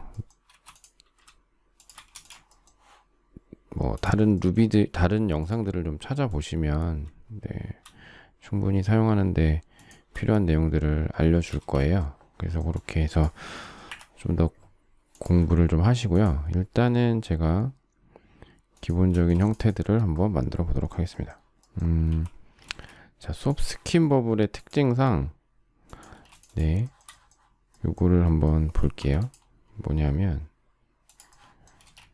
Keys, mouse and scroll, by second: 1.2 shift+m, 1.7 shift+click, 2.1 space, 9.7 shift+click, 11.5 shift+space, 13.8 Delete, 19.1 space, 22.0 q, 22.6 space, 26.1 space, 27.0 shift+double middle click, 28.9 p, 31.8 space.